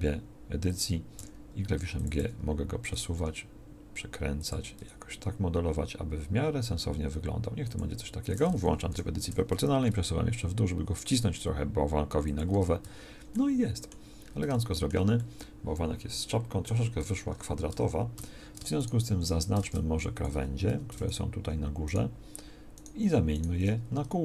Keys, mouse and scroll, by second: 1.2 r, 2.2 g, 4.8 g, 8.8 o, 9.8 g, 12.5 Tab, 12.8 z, 17.6 Tab, 18.1 a, 19.3 a, 19.6 ctrl+Tab, 20.3 a, 20.6 a.